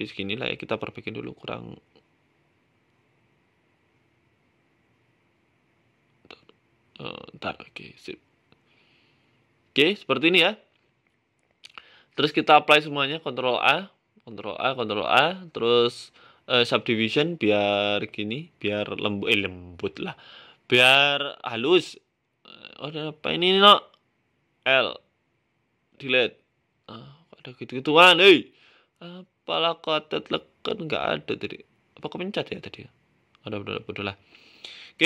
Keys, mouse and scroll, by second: 0.1 right click, 0.8 right click, 3.7 y, 4.6 right click, 5.2 x, 6.1 g, 8.0 middle click, 8.2 z, 8.7 middle click, 9.7 middle click, 12.2 click, 12.4 ctrl+a, 12.9 click, 13.1 ctrl+a, 13.9 Tab, 14.6 ctrl+a, 15.0 ctrl+a, 15.3 ctrl+a, 15.8 q, 16.4 w, 17.7 middle click, 18.1 right click, 18.3-19.0 scroll down 13, 18.8-19.6 scroll up 7, 19.4 right click, 20.2 shift+d, 21.5 middle click, 21.8-22.2 scroll up 6, 22.2 shift+middle click, 22.5 Tab, 22.8 middle click, 23.2 middle click, 24.1 a, 24.2 a, 25.8 l, 26.6 Delete, 27.3 middle click, 27.6 Tab, 27.8 middle click, 28.1 scroll down 4, 28.3 middle click, 28.9 middle click, 29.3 middle click, 29.7 right click, 29.8 Tab, 30.0 scroll up 3, 30.4 a, 30.5 a, 31.4 l, 32.0 Delete, 32.7 Tab, 32.8-33.5 scroll down 6, 33.1 middle click, 33.4 scroll up 2, 33.7 scroll down 3, 34.2 middle click, 34.5 scroll down 1, 34.5 scroll up 2, 34.8 shift+middle click.